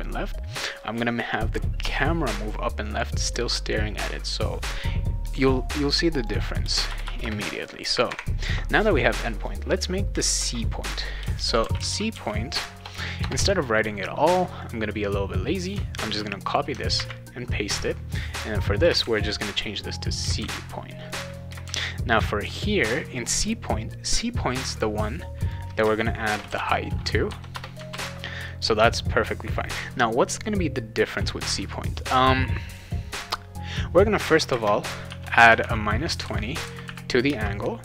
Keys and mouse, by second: 6.2 click, 6.6 Return, 6.9 Return, 7.0 Return, 7.2 Return, 11.4-13.2 typing, 14.6-15.6 drag, 15.9 ctrl+c, 16.4 click, 16.9 ctrl+v, 18.3 click, 19.0 shift+c, 19.8 click, 20.4 shift+c, 21.1 click, 21.6 shift+c, 24.7 click, 26.0-27.1 typing, 27.5 Return, 27.9 ctrl+s, 31.1 click, 32.7 click, 34.5-36.1 typing, 37.2-37.8 typing.